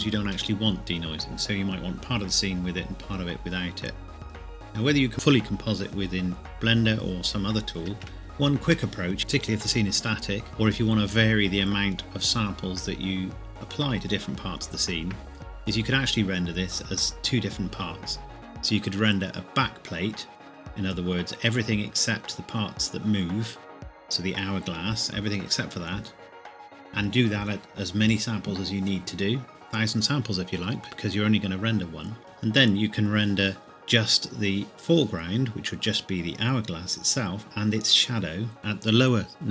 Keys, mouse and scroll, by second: 8.2 shift+scroll down 1, 8.2 shift+middle click, 8.7 scroll down 1, 10.5-11.4 scroll up 1, 16.8 scroll down 1.